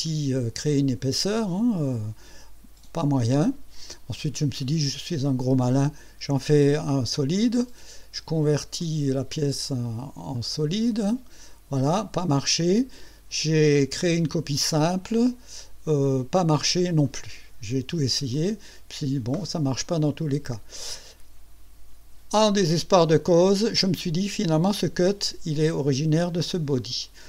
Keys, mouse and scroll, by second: 5.6 click, 8.8 click, 9.3 click, 10.3 click, 17.0 click, 18.3 click.